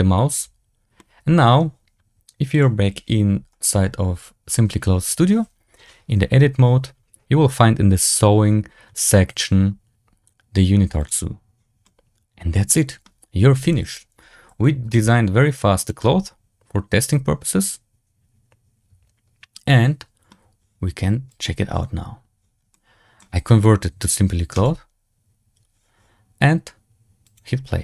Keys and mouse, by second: 0.3 l, 0.9 middle click, 2.5 click, 10.9 click, 11.8-12.9 middle drag, 13.3 3, 13.5 right click, 14.0 l, 14.7 g, 16.0-20.2 drag, 21.3 click, 22.6-23.1 middle drag, 27.3 click.